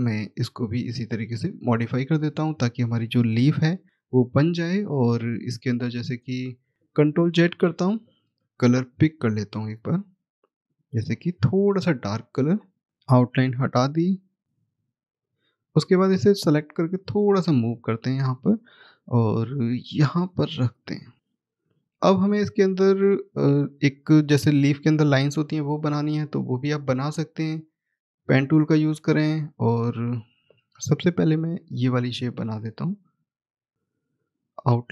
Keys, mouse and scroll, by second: 0.0 click, 2.0-3.4 scroll down 1, 4.6 click, 8.8 click, 11.0 double click, 12.9 click, 13.4 right click, 15.1 click, 18.5 middle click, 19.4 click, 21.9 middle click, 28.0 click, 28.9-30.3 scroll up 1, 31.4 click.